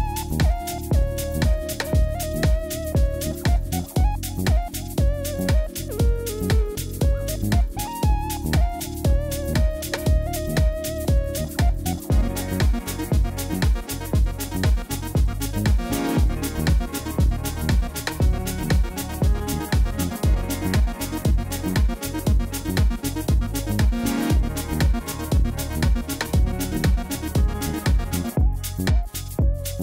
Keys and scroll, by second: 0.5 1, 1.8 3, 2.6 shift+z, 5.6 s, 7.2 g, 7.5 y, 10.3 shift+z, 13.6 Tab, 17.2 Tab, 20.1 3, 21.5 ctrl+r, 22.1 Return, 23.0 ctrl+b, 29.0 Tab.